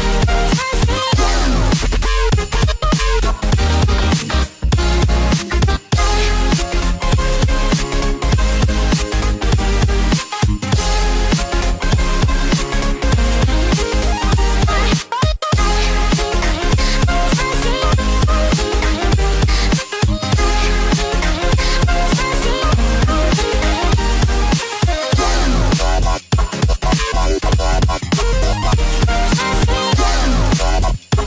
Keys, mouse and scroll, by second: 1.7 KP_3, 3.7 click, 5.9 click, 10.3 click, 11.1-12.2 scroll up 2, 13.5 s, 18.4 click, 24.9 click, 26.4 scroll up 2, 27.2 scroll up 1, 27.2 middle click, 30.6 click.